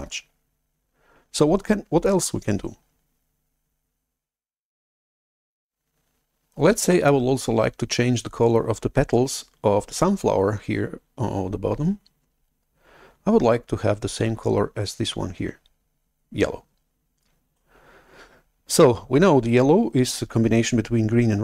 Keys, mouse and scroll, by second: 17.5 shift+super+F11.